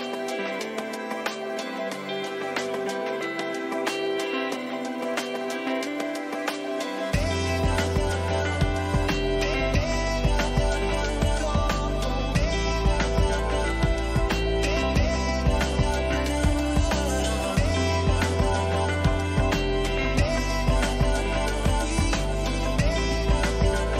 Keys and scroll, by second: 4.4 ctrl+t, 7.6 Return.